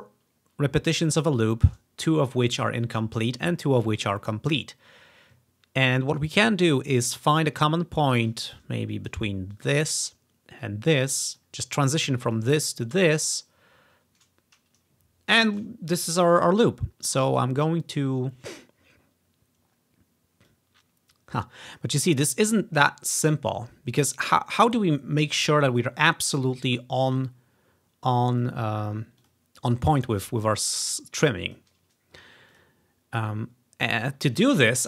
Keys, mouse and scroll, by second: 9.6 click, 10.7 click, 12.3-14.5 drag, 16.4-18.9 drag, 20.6-21.9 drag, 26.2-28.6 drag, 29.3 click, 30.8 click, 32.0-33.8 drag, 34.1 click.